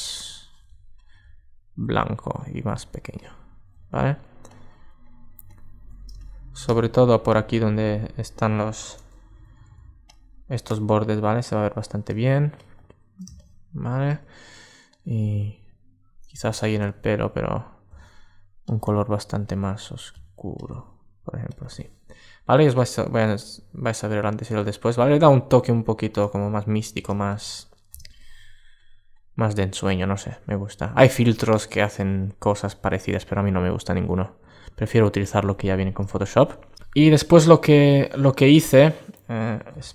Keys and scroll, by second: 4.4 alt+space, 8.4 super+z, 16.2 super+z, 25.1 alt+space, 33.3 super+space.